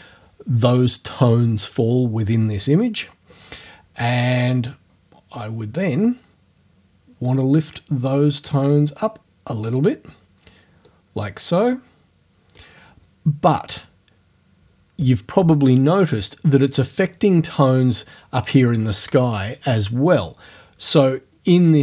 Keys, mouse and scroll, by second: 5.9-8.4 drag, 9.6 click, 10.9-12.8 drag.